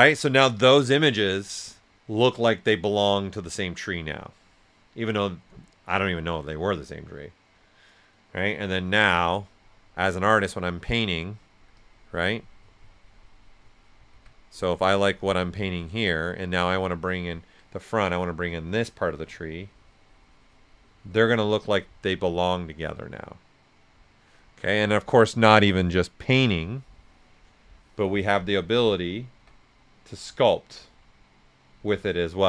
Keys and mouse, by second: 9.0 z, 10.0 alt+right click, 10.5 right click, 10.5 typing, 11.7-14.1 drag, 14.1 s, 14.2 click, 14.8-16.4 drag, 16.4 right click, 16.9 alt+right click, 18.7-21.3 drag, 21.3 right click, 26.0 shift+click, 27.4 click, 29.3 b, 31.8-32.4 typing.